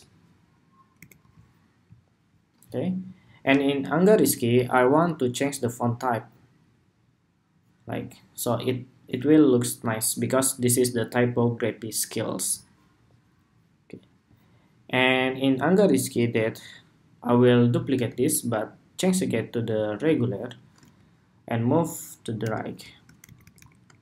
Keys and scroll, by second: 0.7 alt+Right, 17.6 super+d, 22.9 shift+Right, 23.9 alt+Left.